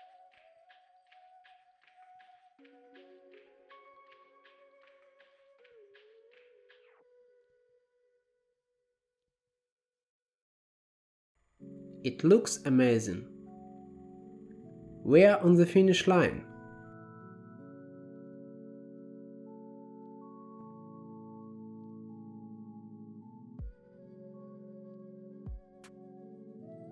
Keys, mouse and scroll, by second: 5.3-6.1 scroll down 6, 6.7-7.5 scroll down 6, 8.3 click, 8.8 g, 9.5 scroll up 5, 9.7-10.6 middle drag, 10.6-13.0 drag, 17.5-19.5 drag, 22.0-22.5 drag, 23.2-26.4 drag.